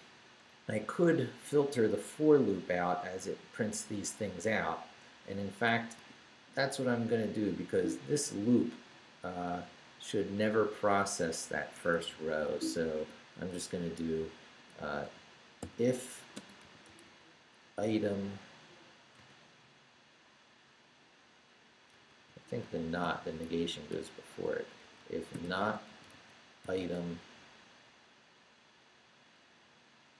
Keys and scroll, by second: 6.0 q, 7.7 Down, 9.0 Down, 11.7 Escape, 12.5 o, 13.0 Tab, 15.0 i, 16.3 space, 16.6 i, 17.8 m, 19.1 space, 21.9 BackSpace, 23.0 n, 24.8-26.8 typing.